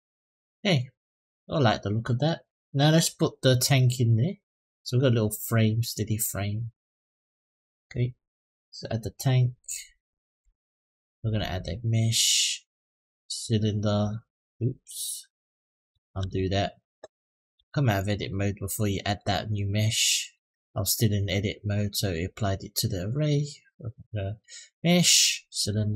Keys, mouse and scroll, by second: 5.6 middle click, 9.9 middle click, 10.8-12.6 drag, 15.8 ctrl+z, 17.0 click, 17.3 Tab, 17.7 click, 18.8 click, 20.0-21.6 drag, 23.4-25.9 drag.